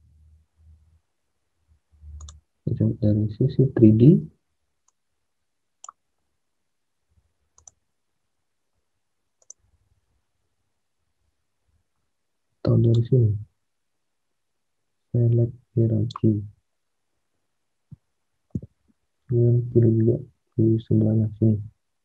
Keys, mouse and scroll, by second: 0.0 space, 2.7 space.